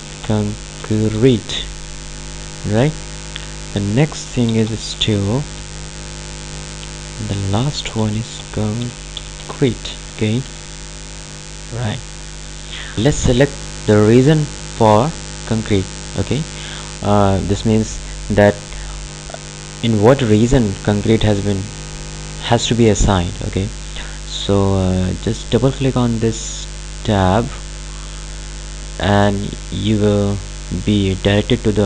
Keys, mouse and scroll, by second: 0.0-1.8 typing, 3.3 click, 4.5-6.1 typing, 7.4 click, 7.9-11.1 typing, 11.9 click, 27.3 click.